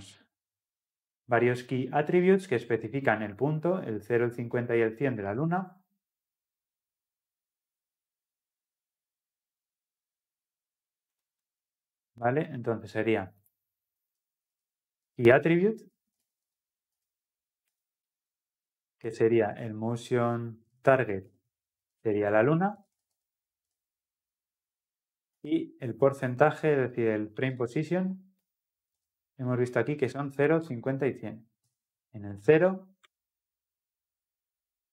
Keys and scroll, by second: 17.0 Return.